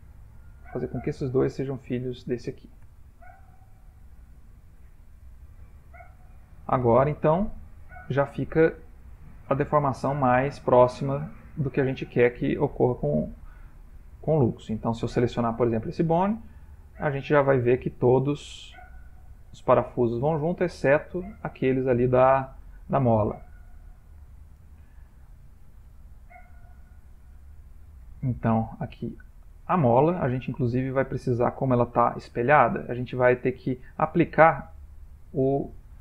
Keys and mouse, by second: 0.0 shift+click, 1.4 shift+click, 3.1 ctrl+p, 7.4 ctrl+middle click, 9.1 click, 11.4 shift+middle click, 11.7 shift+middle click, 12.5 ctrl+middle click, 12.7 ctrl+middle click, 12.8 shift+middle click, 13.3 middle click, 13.4 shift+middle click, 14.9 click, 17.0 r, 25.9 middle click, 27.5 ctrl+middle click, 27.6 ctrl+middle click, 28.3 shift+middle click, 28.5 shift+middle click, 29.2 ctrl+middle click, 30.7 click, 33.0 click, 34.7 middle click.